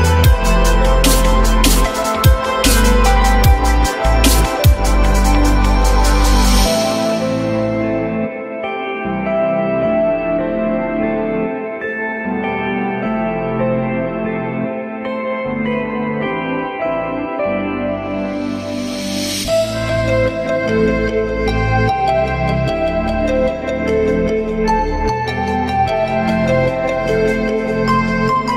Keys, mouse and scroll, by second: 3.7 alt+middle click, 11.8 ctrl+click, 13.1 shift+click, 14.7 ctrl+click, 15.5 ctrl+z, 15.9 ctrl+click, 16.4 shift+click, 16.4 shift+double click, 24.8 alt+middle click, 25.8 alt+middle click.